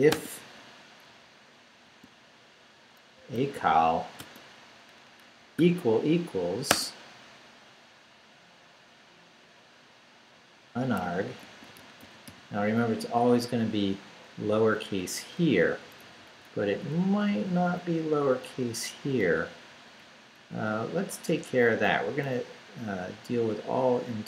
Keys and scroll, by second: 0.0-0.1 typing, 1.8 typing, 2.9-4.2 typing, 5.2 =, 6.7 space, 11.2-12.8 typing, 13.0 Left, 14.8 Left, 15.6 Right, 20.0 Up.